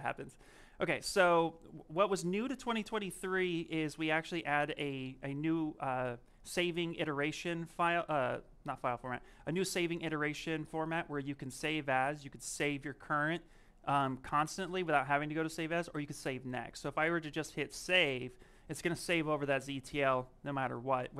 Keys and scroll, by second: 0.3 s.